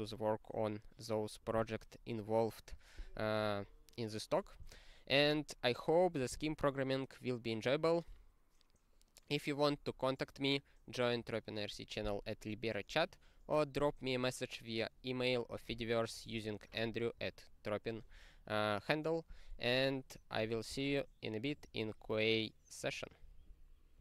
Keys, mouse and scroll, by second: 13.0-14.8 scroll down 7, 14.8-16.1 scroll down 10, 16.1 click, 16.3 click, 16.3 double click, 16.4 double click, 17.2 click, 17.2 click.